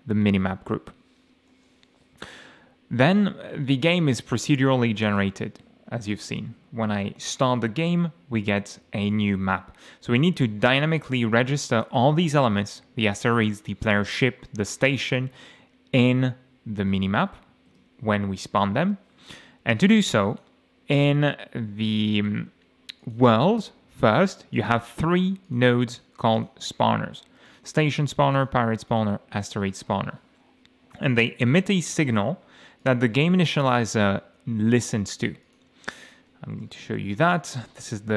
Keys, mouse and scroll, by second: 0.4 click, 1.5 middle click, 5.1 click, 6.1 click, 7.5 F6, 8.8 m, 17.0 m, 17.7 F8, 20.2 click, 23.0 click, 24.5 click, 25.4 click, 25.9 click, 26.3 click, 27.4 click, 28.3 click, 28.9 click, 32.8 click, 35.4 click, 36.0 click, 36.9 ctrl+shift+F11.